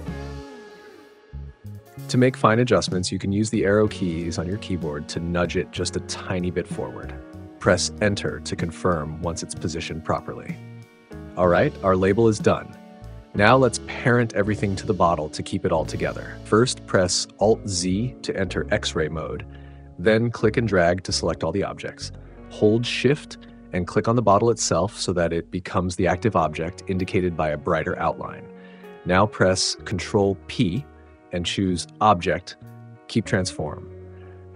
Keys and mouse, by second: 3.9 Down, 7.4 Return, 17.1 alt+z, 23.6 shift+click, 31.4 ctrl+p.